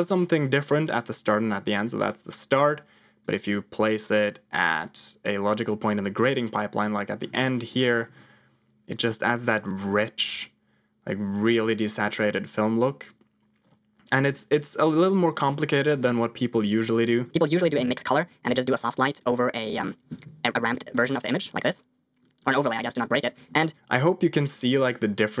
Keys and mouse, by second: 0.8 middle click, 2.1 alt+click, 2.3 alt+click, 3.8-6.4 drag, 7.3 middle click, 8.9-13.1 drag, 13.7 click, 14.2 alt+click, 15.5 middle click, 16.5 click, 16.8 click, 17.0 shift+a, 18.6 click, 19.6 click, 21.0 ctrl+click, 21.3 click, 22.3 click, 23.1 click, 23.3 g, 23.6 click, 23.9-25.4 drag.